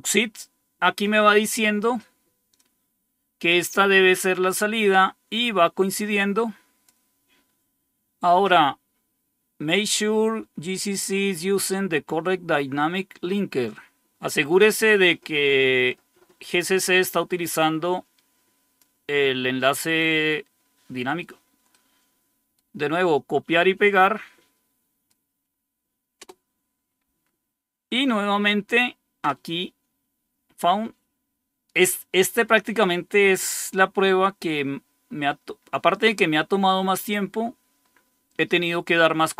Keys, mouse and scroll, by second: 2.4-4.3 drag, 5.3-6.8 drag, 7.4 scroll down 2, 16.4-18.7 drag, 20.8 right click, 21.6 right click, 23.8 right click, 26.1 Return, 30.3 scroll down 1.